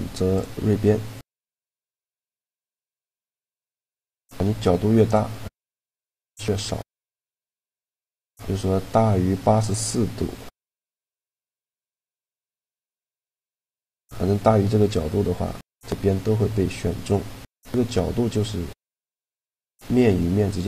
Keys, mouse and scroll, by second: 0.0 click, 0.8-2.4 middle drag, 1.9-3.7 drag, 4.9-6.6 middle drag, 6.6-8.6 drag, 13.4-15.4 middle drag, 15.8-18.0 middle drag, 18.0-19.6 drag.